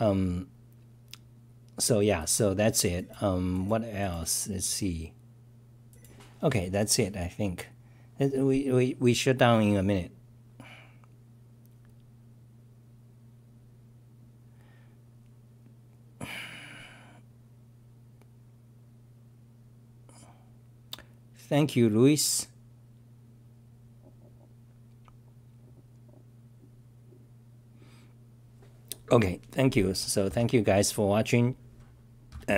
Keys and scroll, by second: 8.8-9.5 typing, 25.8-26.5 typing.